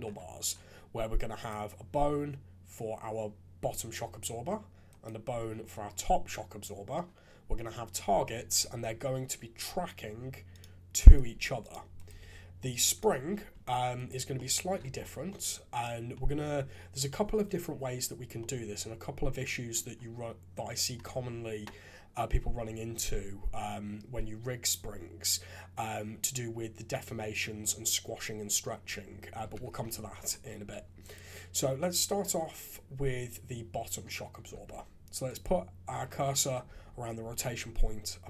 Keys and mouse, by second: 1.3 click, 8.7 r, 11.0 click, 11.2 r, 11.9 click, 12.0 r, 13.3 alt+a, 14.3-14.7 drag, 14.8 shift+z, 15.3 click, 18.4-19.7 drag, 29.4 KP_3, 29.7 shift+z, 30.7 alt+a, 34.5 shift+s, 36.7 shift+z.